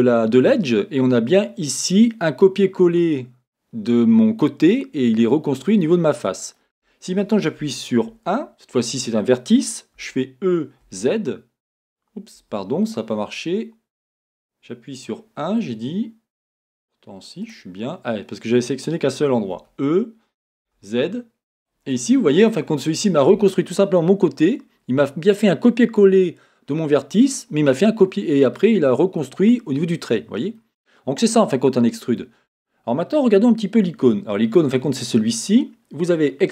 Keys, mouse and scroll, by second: 8.1 1, 10.0 e, 12.5 Escape, 17.4 click, 19.5 e, 21.6 click, 21.9-35.2 middle drag, 35.2-36.5 drag.